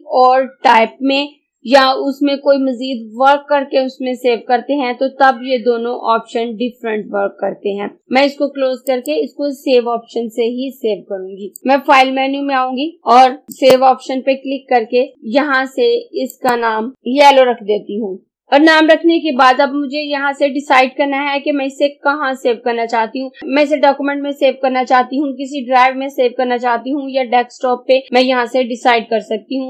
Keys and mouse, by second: 9.0 click, 11.6 click, 13.6 click, 16.3 click, 18.1 y.